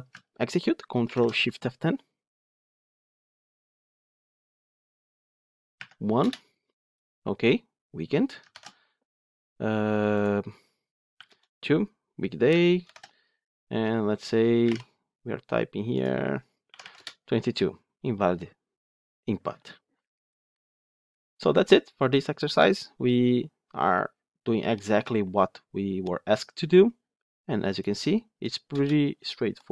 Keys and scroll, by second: 1.0 ctrl+shift+F10, 8.4 ctrl+shift+F10, 12.7 ctrl+shift+F10.